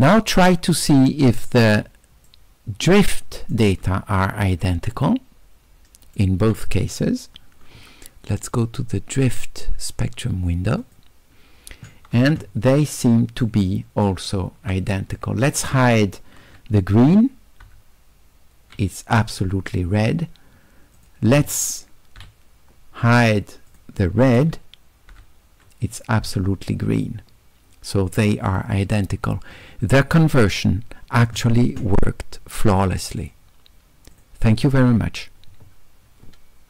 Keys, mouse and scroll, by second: 0.8 click, 1.8 d, 2.3-3.5 right drag, 4.8 d, 5.1-6.2 right drag, 8.4 click, 10.8 click, 13.5-14.1 shift+right drag, 15.2 click, 21.0 click, 23.7 click, 32.8 click, 34.2 click.